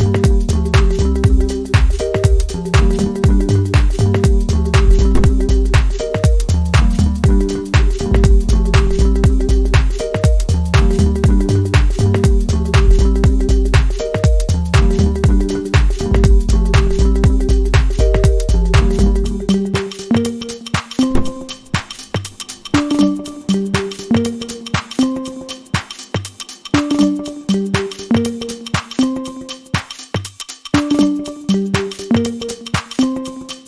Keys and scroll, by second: 6.1 scroll down 1, 6.2 scroll up 1, 29.1 scroll down 1, 29.3-29.6 scroll up 1, 32.7-33.0 scroll down 1, 33.1-33.5 scroll up 1.